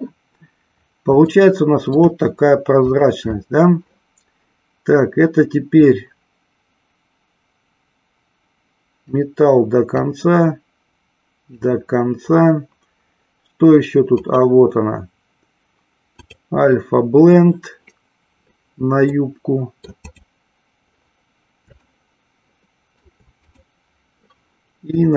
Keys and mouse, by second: 1.3 shift+middle click, 2.8 click, 5.7-9.1 drag, 10.1-11.6 drag, 14.2-16.6 drag, 19.2 middle click, 20.1 click, 21.8-23.1 shift+middle drag, 23.5 click.